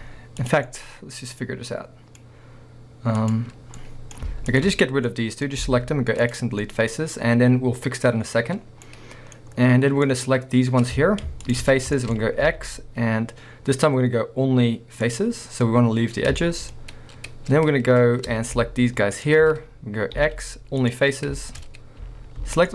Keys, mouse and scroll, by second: 0.4 click, 0.7 middle click, 1.3-1.8 middle drag, 3.2 click, 3.8 middle click, 4.5 shift+click, 5.1 middle click, 5.6 x, 6.7-10.1 middle drag, 8.6 scroll down 2, 9.4-10.1 scroll up 2, 10.1 click, 11.5 ctrl+shift+click, 12.2 scroll up 2, 12.5 x, 16.4-19.2 shift+middle drag, 19.2 alt+shift+click, 20.2 x, 21.2 scroll down 2, 21.4 shift+middle drag, 21.6-22.5 scroll up 2, 22.5 alt+shift+click.